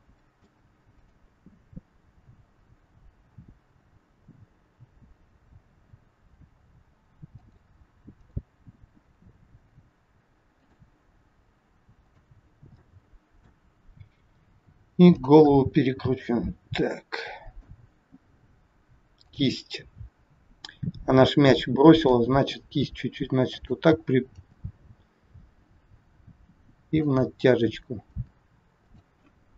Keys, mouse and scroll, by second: 0.9 click, 2.0 g, 8.1 click, 8.8 g, 12.0 click, 12.7 middle click, 14.2 r, 15.5 middle click, 15.5 scroll up 1, 16.4 scroll down 1, 16.9 middle click, 16.9 scroll down 1, 19.1 click, 20.0 scroll up 4, 20.6 scroll down 1, 22.1 scroll down 1, 22.1 r, 24.2 g.